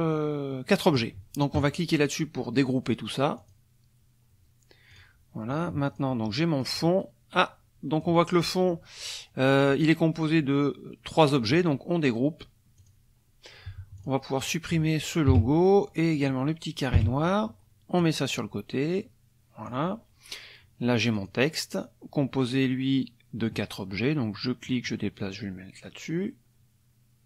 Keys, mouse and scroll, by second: 3.4 click, 4.9 click, 5.8 click, 6.6-8.2 drag, 12.8 click, 14.0 click, 14.4 click, 15.3 Delete, 16.1 click, 16.9 Delete, 18.0-19.9 drag, 21.1 click, 24.6-27.2 drag.